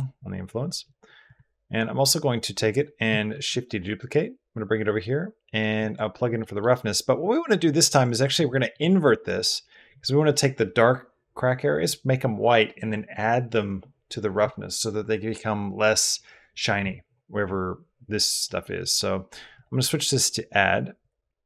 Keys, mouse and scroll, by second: 1.0 click, 3.1 shift+d, 5.6 click, 6.2 drag, 8.3 drag, 18.3 middle drag, 19.4-20.9 middle drag, 21.3 click.